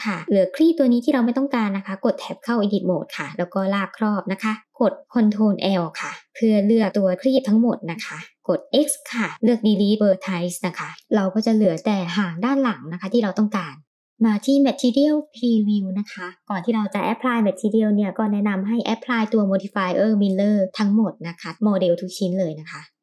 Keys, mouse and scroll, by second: 0.2 middle click, 1.0 Tab, 2.6-4.4 drag, 6.2 ctrl+l, 7.8 x, 10.9 middle click, 12.6-13.0 middle drag, 13.3 Tab, 13.9 shift+middle drag, 14.1-14.5 scroll down 1, 15.4 click, 17.2 click, 19.5-20.4 drag, 21.5 click.